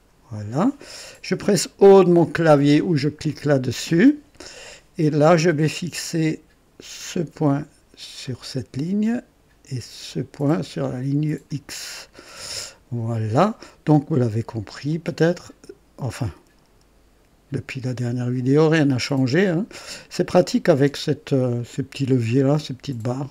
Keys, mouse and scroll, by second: 3.2 o, 7.0 click, 8.2 click, 10.0 click, 11.4 click, 13.7 right click, 14.8-21.1 drag, 21.6-23.3 drag.